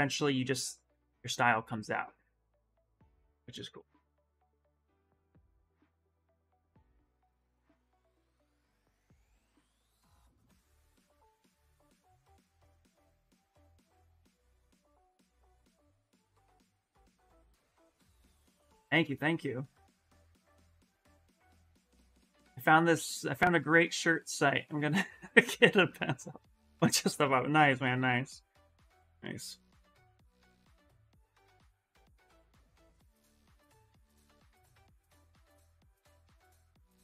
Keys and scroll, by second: 6.7 ctrl+z, 7.1 ctrl+z, 8.1 ctrl+z, 20.2 s, 35.6 s.